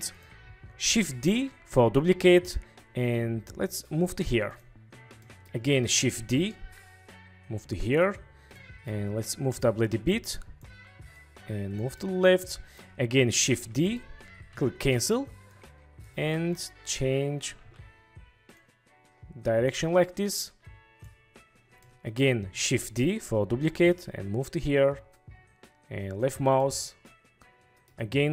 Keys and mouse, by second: 1.4 shift+d, 5.3 click, 6.4 shift+d, 8.0 click, 8.7-9.0 drag, 12.2-12.9 drag, 13.6 shift+d, 14.6 Escape, 15.6 click, 17.8 ctrl+z, 22.0 click, 22.9 shift+d, 26.8-28.0 drag.